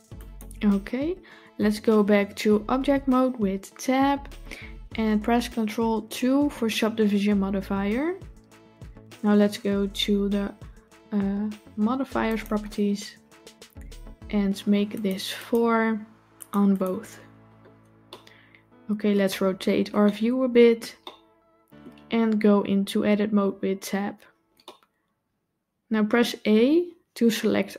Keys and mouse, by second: 3.8 Tab, 5.9 ctrl+2, 14.8 click, 16.2 click, 16.6 click, 17.9-19.0 middle drag, 19.9-20.6 shift+middle drag, 20.9-21.7 middle drag, 23.2 Tab, 24.6-26.1 middle drag, 26.4 a.